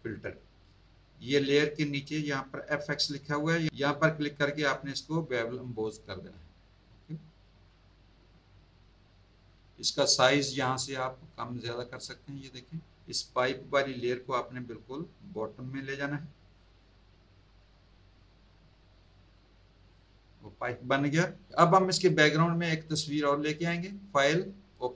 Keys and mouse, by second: 2.9 click, 5.6 click, 11.3 click, 13.9 click, 17.6 click, 19.9 click, 23.9 click, 24.7 click.